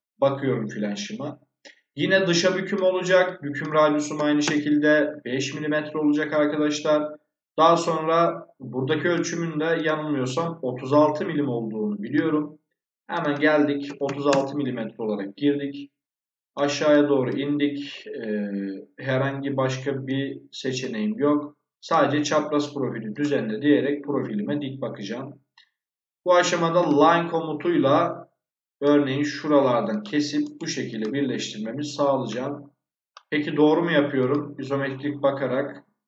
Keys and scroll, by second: 4.0 5, 4.3 Return, 13.8 3, 13.9 6, 14.2 Return.